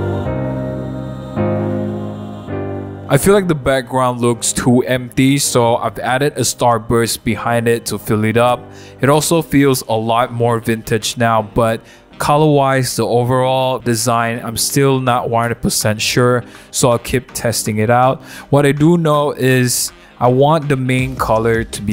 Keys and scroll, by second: 0.5 super+a, 0.5 super+c, 0.5 super+d, 0.5 super+w, 0.6 super+v, 4.8 super+t, 7.6 Return, 9.0 super+t, 19.2 Return, 20.7 super+0, 21.0 super+-, 21.4 super+-.